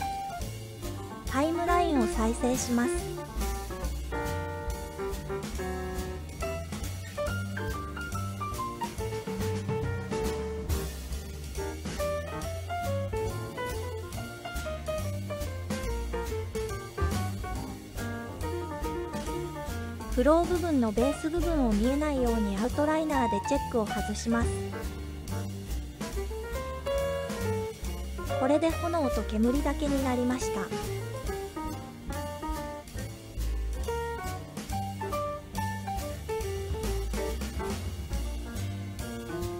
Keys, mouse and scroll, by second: 3.1 space, 13.5 space, 16.0 click, 16.9-19.1 drag, 19.6 click, 22.7 click, 25.6 space, 32.6 space, 37.8 click.